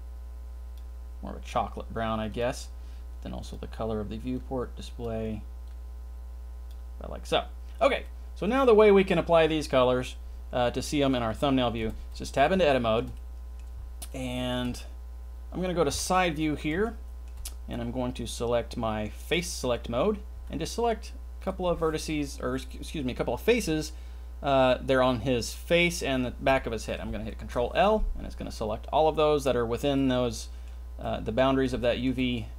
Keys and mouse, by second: 8.0-8.8 middle drag, 11.8 Tab, 12.7 shift+middle click, 13.1 middle click, 14.1 shift+middle click, 15.9 KP_3, 16.8 shift+middle click, 19.2 click, 20.3 c, 21.4 click, 27.4 ctrl+l, 29.9 middle click, 30.4 middle click, 31.0 middle click, 31.8 shift+middle click, 32.1 middle click.